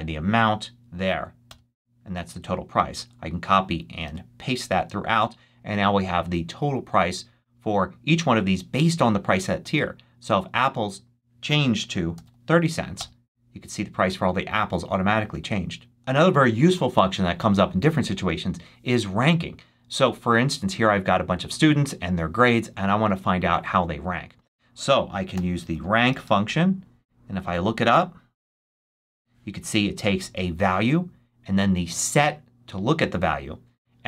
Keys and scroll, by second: 1.4 Return, 2.9 super+c, 4.0 super+v, 12.2 3, 12.9 Return, 25.0-26.9 typing, 28.0-29.3 typing.